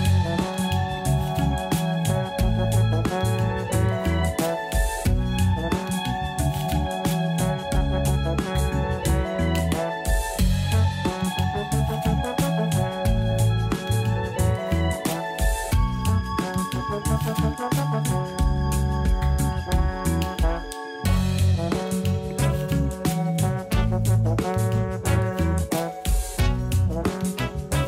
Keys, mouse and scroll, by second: 0.7 scroll up 3, 3.8-4.1 scroll down 3, 4.1-5.0 scroll up 5, 5.0 click, 6.2 click, 6.6-7.4 scroll up 2, 7.4-8.1 shift+middle drag, 8.1-9.3 scroll up 3, 9.6 click, 10.5 Tab, 10.9 a, 11.7 alt+s, 14.8 ctrl+z, 15.3 a, 15.5 a, 15.8 3, 16.2 click, 16.4 click, 17.0 s, 20.6 Tab, 20.9-21.6 scroll up 4, 21.6 g, 23.9-24.4 scroll down 1, 24.4 click, 24.8-25.1 scroll down 1, 25.1 Tab, 25.3-25.7 scroll up 1, 25.7 3, 25.9 click, 26.7 shift+click, 27.3 shift+click.